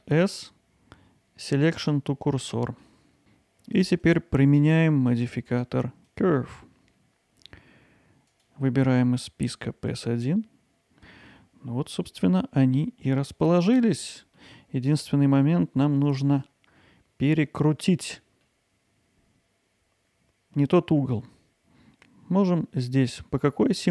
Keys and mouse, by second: 2.3-2.8 middle drag, 10.0-14.4 drag, 14.4-15.4 middle drag, 15.8-16.2 middle drag, 16.4-17.6 middle drag, 17.8-20.6 middle drag.